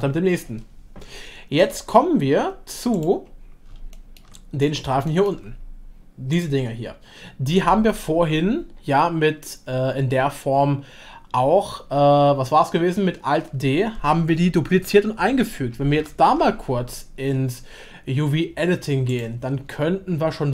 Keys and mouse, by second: 1.6-1.9 middle drag, 3.9 shift+drag, 4.6 middle click, 5.1 shift+middle drag, 6.3 click.